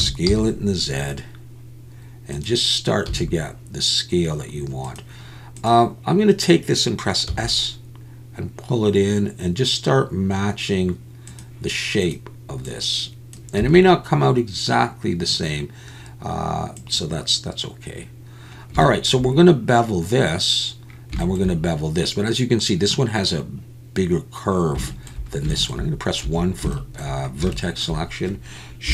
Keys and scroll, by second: 0.0 s, 0.3 z, 3.1 s, 7.3 s, 13.6 s, 26.3 1.